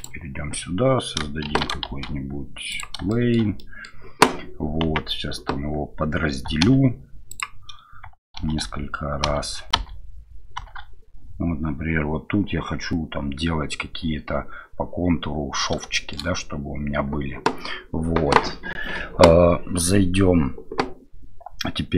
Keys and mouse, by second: 0.0 click, 1.4 shift+c, 1.8 shift+a, 3.1 shift+middle drag, 3.6 middle drag, 4.8 Tab, 6.6 w, 8.4-10.7 shift+r, 15.9 shift+middle click.